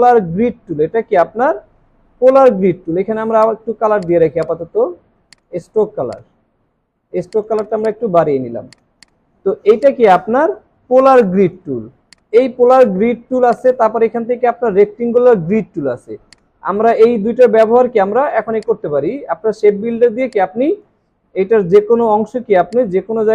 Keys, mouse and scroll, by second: 4.4 double click.